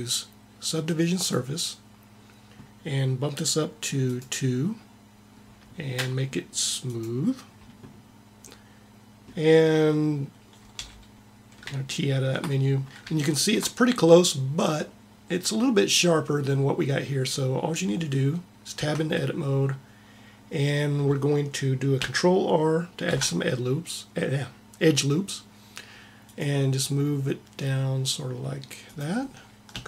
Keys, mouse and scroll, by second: 3.9-5.2 drag, 8.3-10.0 middle drag, 10.5 t, 17.3-20.0 middle drag, 18.6 Tab, 22.9 ctrl+r, 26.1 ctrl+r.